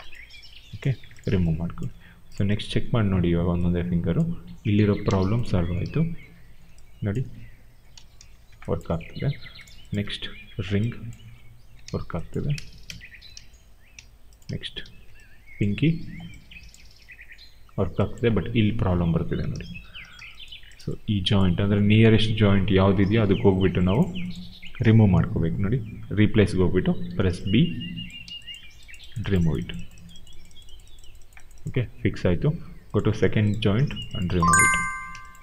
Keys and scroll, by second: 0.8 w, 2.6 e, 4.7 ctrl+z, 5.0 q, 5.7 e, 7.8 ctrl+z, 8.8 q, 9.9 e, 11.7 ctrl+z, 12.5 ctrl+z, 12.7 q, 13.2 ctrl+z, 14.7 e, 19.4 ctrl+z, 27.0 b.